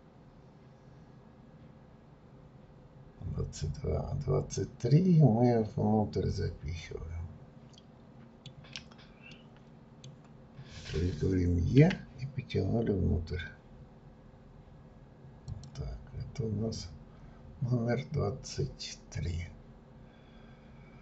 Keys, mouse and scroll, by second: 9.3-11.8 middle drag, 16.6-17.2 scroll down 1, 17.2-19.5 scroll down 1, 19.5-20.1 scroll up 2.